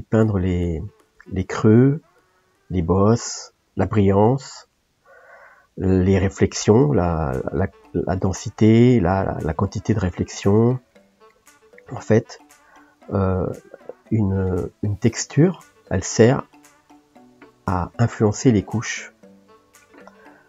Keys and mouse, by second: 2.6-6.6 drag, 6.6 shift+middle click, 7.3-10.9 drag, 10.9 shift+middle click, 11.7-16.9 drag, 16.9-18.6 middle drag, 18.6-20.3 drag, 20.3-20.4 middle drag.